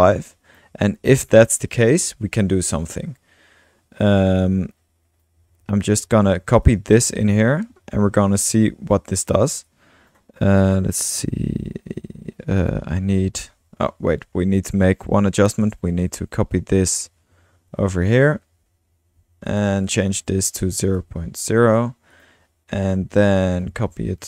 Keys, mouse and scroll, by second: 1.7 click, 2.8 Tab, 2.8 typing, 4.4 click, 5.7 ctrl+c, 6.3 ctrl+x, 6.6 ctrl+click, 7.1 ctrl+v, 8.6 ctrl+click, 9.7-10.2 drag, 12.6 click, 15.4-16.1 typing, 15.6-17.0 drag, 16.4 ctrl+x, 17.2 ctrl+v, 18.0-18.7 typing, 19.5 click, 19.9 click, 20.7-21.5 typing, 22.1 click, 23.6 ctrl+v.